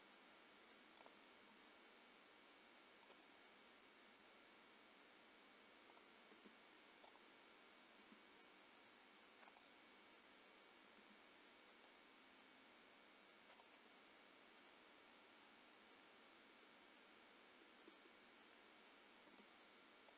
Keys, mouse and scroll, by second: 1.0 click, 1.4 g, 3.2 middle click, 4.0 g, 6.3 r, 7.4 middle click, 8.0 r, 9.7 middle click, 11.0 middle click, 11.0 r, 13.8 middle click, 19.3 g.